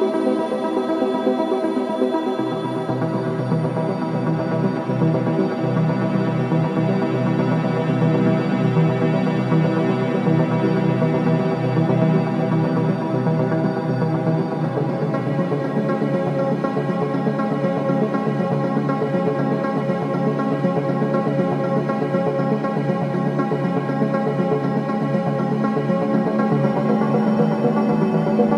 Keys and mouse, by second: 0.4 click, 1.1 click, 1.7 click, 2.1 click, 2.6 click, 5.4 click, 8.6 alt+shift+click, 8.9 ctrl+alt+click, 9.7 g, 9.9 y, 12.7 z, 12.9 z, 14.1-15.7 drag, 15.9-24.6 alt+drag, 26.3-28.0 alt+drag, 28.2-28.5 drag.